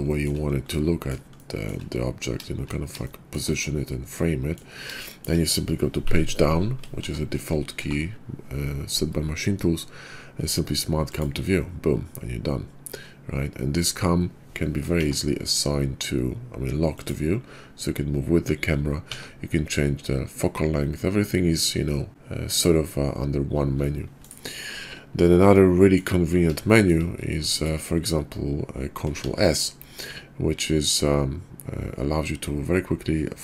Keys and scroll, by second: 5.9 Page_Down, 7.0 Page_Down, 7.8 Page_Down, 14.9 Page_Down, 19.0 Page_Down, 23.5 Page_Down, 27.4 x, 29.1 ctrl+s.